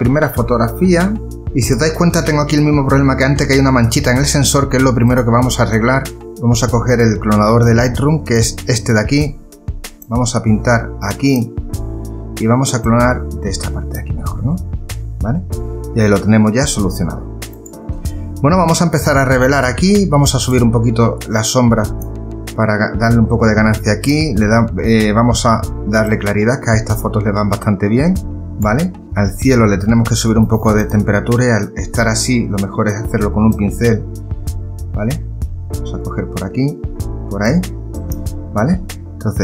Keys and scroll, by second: 6.2 ctrl+z.